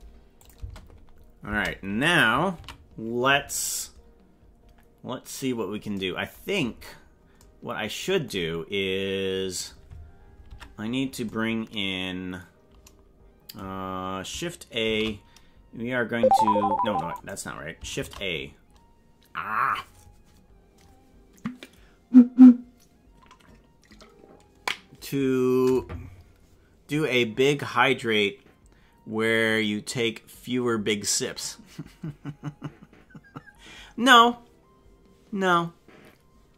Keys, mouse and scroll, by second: 0.4 click, 0.5 space, 1.5 space, 2.6 ctrl+s, 6.6-7.3 scroll down 5, 10.5 ctrl+Tab, 14.8 shift+s, 18.1 shift+a.